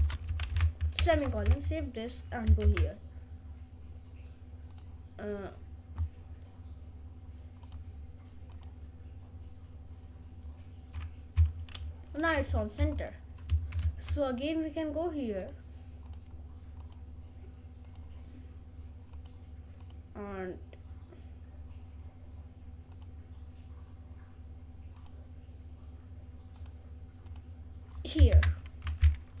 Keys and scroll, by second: 0.2-1.3 typing, 28.5 Return.